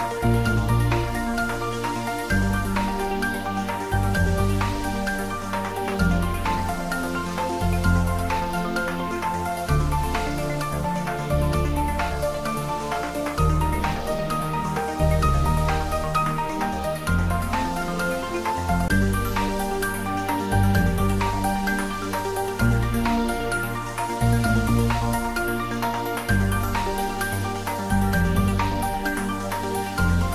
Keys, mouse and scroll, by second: 2.4 click, 10.8-12.7 scroll up 1, 19.4 click, 24.1 Tab, 25.6 click, 26.0 right click, 26.4 click, 29.5-30.3 drag.